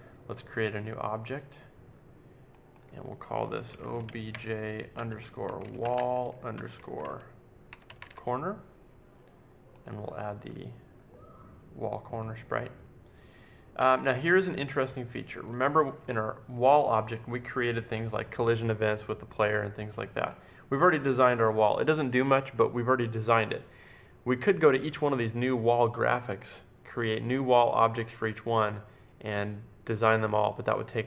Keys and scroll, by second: 3.6-8.4 typing, 10.2 typing.